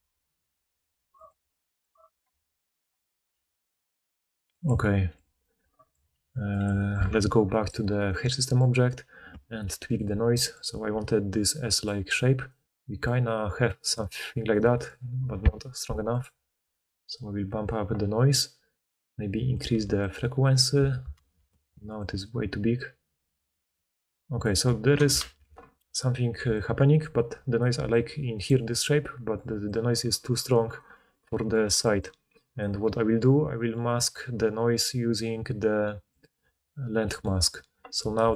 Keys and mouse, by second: 2.1 click, 2.2 middle click, 2.8 click, 2.9 middle click, 3.1 click, 3.2-5.4 middle drag, 3.3 g, 5.4 click, 5.5 middle click, 6.1 g, 7.0 Tab, 8.0 click, 8.4-9.9 middle drag, 9.9 click, 10.0-11.4 middle drag, 10.9-14.6 typing, 11.4-20.1 drag, 12.1-14.5 middle drag, 12.1-14.5 right drag, 20.1 right click, 21.0 ctrl+click, 21.3 ctrl+z, 21.4-27.6 right drag, 22.0-27.6 shift+drag, 22.0-27.6 shift+middle drag, 25.3 ctrl+z, 26.4-32.6 typing, 32.6-33.0 drag, 32.6-33.0 middle drag, 32.6-33.0 right drag.